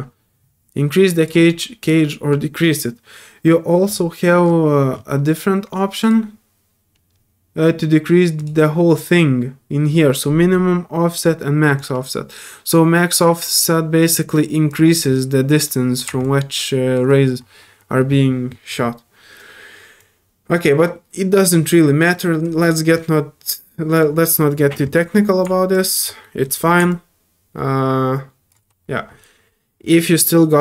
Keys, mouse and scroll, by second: 1.8 click, 5.0 middle click, 5.0 scroll up 2, 6.0 click, 8.4 click, 11.7-14.7 drag, 15.3 middle click, 15.6 middle click, 16.2 alt+click, 20.0-21.4 drag, 22.6-22.9 scroll down 2, 23.9 click, 25.7 click, 26.2 middle click, 26.9-28.5 alt+drag.